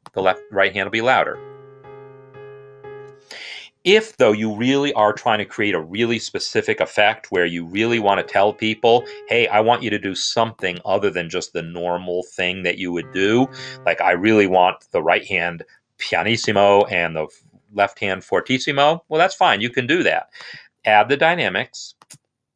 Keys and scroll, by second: 1.1 space, 4.2 space, 7.2-8.7 typing, 9.5 Escape, 11.1-13.2 typing, 14.0 Escape.